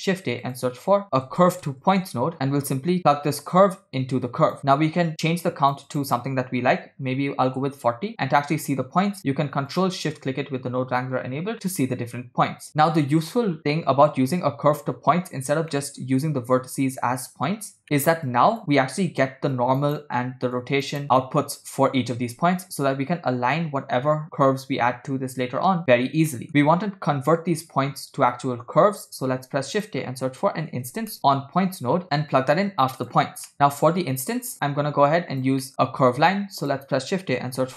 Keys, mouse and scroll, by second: 3.4-4.6 drag, 5.1 click, 5.9-7.6 drag, 9.2 click, 9.8 ctrl+shift+click, 13.2 shift+middle click, 13.4-14.3 scroll up 4, 14.3-15.5 drag, 15.8-16.2 middle drag, 17.8 middle click, 18.3-18.6 drag, 19.6 click, 20.6-21.0 drag, 26.4 middle click, 29.3 shift+a, 33.6 middle click, 33.7 click, 34.5 click, 35.1 click, 35.7 middle click, 36.0 shift+a.